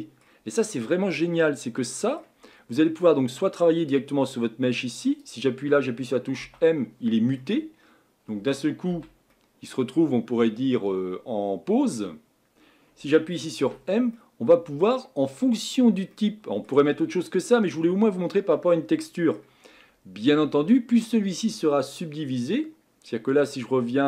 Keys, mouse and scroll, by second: 0.5-0.9 scroll down 3, 0.9-6.4 middle drag, 6.4 m, 7.4-8.9 middle drag, 8.9 Tab, 9.3-13.6 middle drag, 13.6 m, 14.1-15.3 middle drag, 15.3-15.7 scroll up 4, 15.7-16.1 scroll down 3, 16.1-24.0 middle drag.